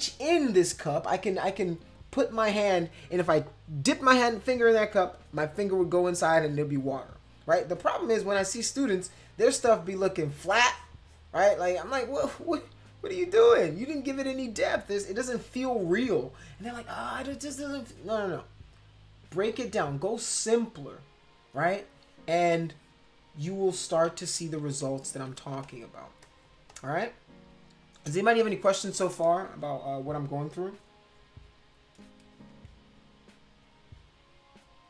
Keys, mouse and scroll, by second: 9.0 click, 9.1 middle click, 9.7-11.6 drag, 22.6 click, 24.1 ctrl+z, 24.4 ctrl+z, 25.1 ctrl+z, 25.5 space, 25.6 click, 26.2 click, 26.7 click.